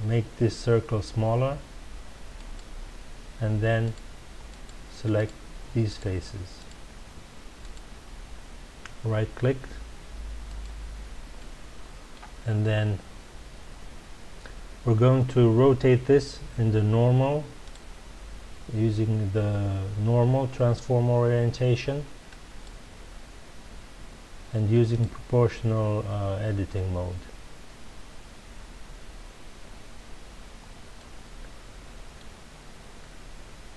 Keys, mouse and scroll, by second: 10.6 right click, 11.3-14.4 middle drag, 17.6-20.6 drag, 24.9 click, 30.9-33.7 middle drag.